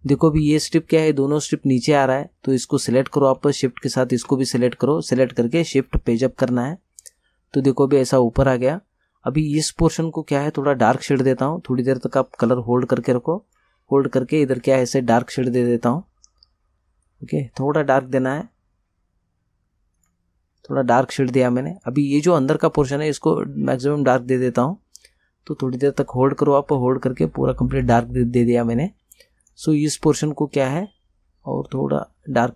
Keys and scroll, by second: 6.2 shift+Page_Up.